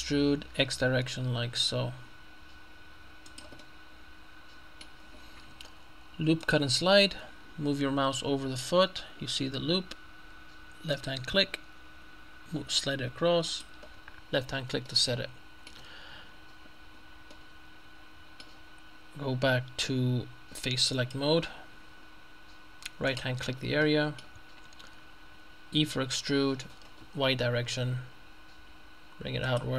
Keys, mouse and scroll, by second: 0.6 x, 3.3 click, 4.5 middle click, 6.5 click, 10.9 click, 13.5 click, 14.9-16.2 shift+middle drag, 16.3-16.9 scroll up 1, 16.9-17.4 scroll up 1, 17.4 scroll up 1, 21.0 click, 23.1 right click, 23.5-23.9 scroll down 1, 23.9 middle click, 25.9 e, 27.3 y, 29.5 click.